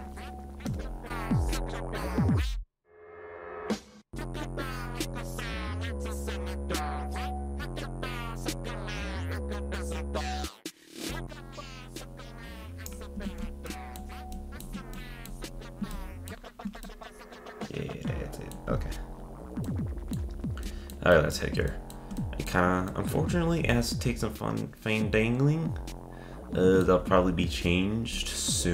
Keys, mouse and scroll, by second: 11.2 click, 13.2 Tab, 13.6-15.5 shift+middle drag, 15.5-15.9 scroll up 2, 15.9-18.7 shift+middle drag, 18.7-19.6 scroll down 1, 19.6-28.7 middle drag.